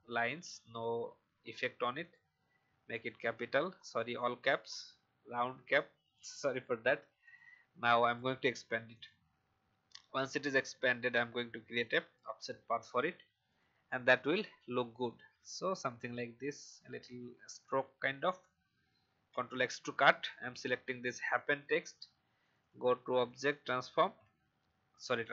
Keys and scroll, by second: 1.0 Down, 19.4 ctrl+x, 24.0 ctrl+f.